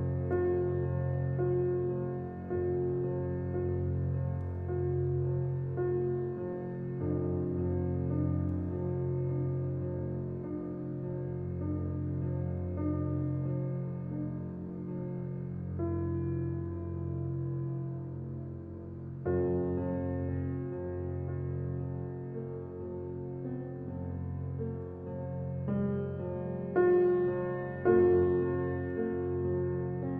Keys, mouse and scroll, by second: 1.8 click, 6.8 click, 10.2-12.0 alt+right drag, 12.0-20.1 drag, 20.1 space, 20.3 click, 20.6 space, 22.2-25.4 drag, 25.4 ctrl+scroll down 1, 26.0 ctrl+alt+scroll down 1, 26.7 ctrl+alt+scroll up 1, 27.8 alt+click, 28.8-30.1 drag.